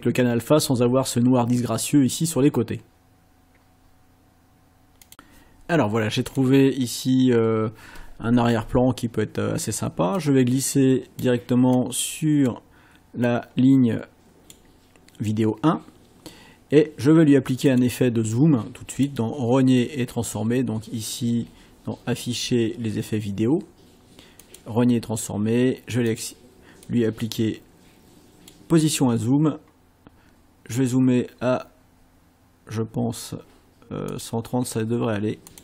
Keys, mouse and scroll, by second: 5.1 click, 6.3 click, 10.2-11.4 drag, 11.8 click, 13.2-14.7 drag, 17.7 click, 18.9 click, 24.4 click, 26.1 click, 26.8-28.6 drag, 31.0-31.4 scroll up 1, 32.0 scroll up 1, 34.1 click, 35.5 click.